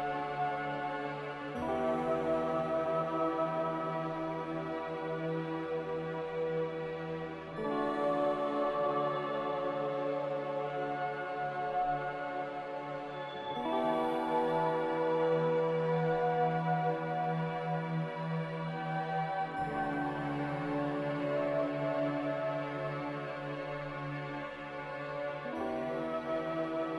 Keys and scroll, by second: 2.7 ctrl+g, 9.3 n, 14.2 m, 19.2 Escape.